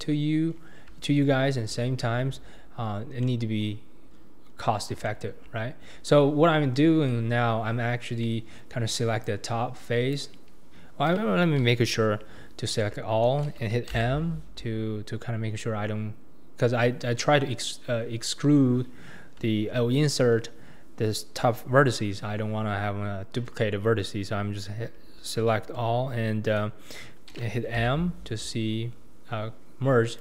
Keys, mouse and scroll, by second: 0.0 shift+click, 0.5-1.0 scroll down 3, 1.0 shift+middle click, 1.5 scroll up 2, 1.9 alt+z, 3.2 middle click, 4.1-4.5 scroll up 2, 4.5-5.1 scroll down 2, 5.1-6.4 shift+middle drag, 6.4-6.8 scroll down 1, 6.8 middle click, 7.4-7.8 scroll up 2, 8.2 middle click, 9.0 click, 9.8 click, 12.9 a, 13.9 m, 27.8 m.